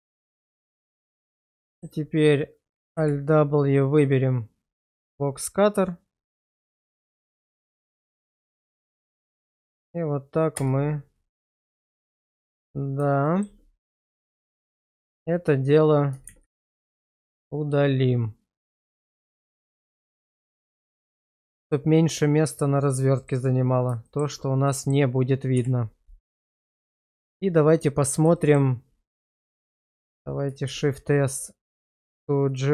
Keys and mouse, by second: 0.1 shift+middle click, 0.9 alt+middle click, 1.6 shift+middle click, 2.9 alt+w, 4.9 click, 10.7 space, 13.2 shift+middle click, 16.3 shift+z, 16.9-21.7 middle drag, 22.5 middle click, 24.0 shift+middle click, 24.7 middle click, 25.5 /, 26.9 shift+middle drag, 27.7-28.1 middle drag, 28.3 shift+middle click, 29.3 middle drag, 30.6 shift+s.